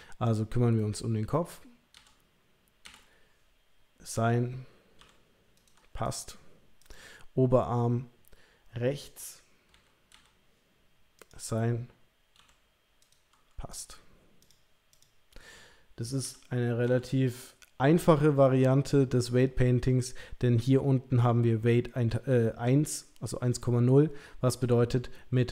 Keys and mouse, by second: 0.2 click, 2.0 l, 2.9 l, 4.1 click, 5.0 g, 6.1 click, 6.8 click, 9.7 l, 10.1 l, 12.4 g, 13.7 click, 16.2 l, 16.9 l.